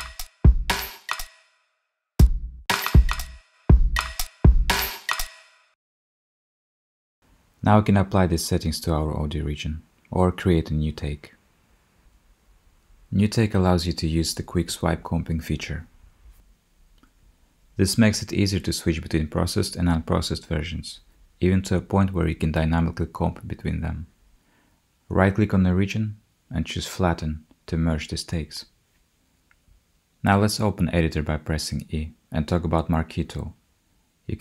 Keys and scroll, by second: 30.4 e.